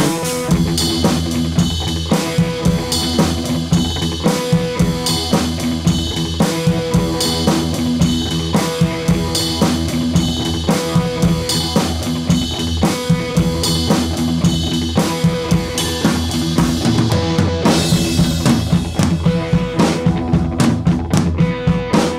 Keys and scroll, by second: 4.1 Right, 4.2 Right, 4.4 Right, 4.5 Right, 18.3 BackSpace, 21.5 super+d.